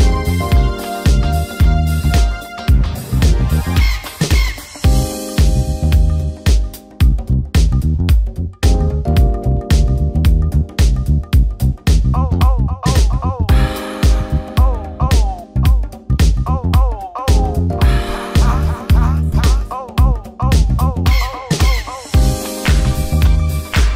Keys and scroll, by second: 17.1 shift+F5, 19.4 ctrl+d.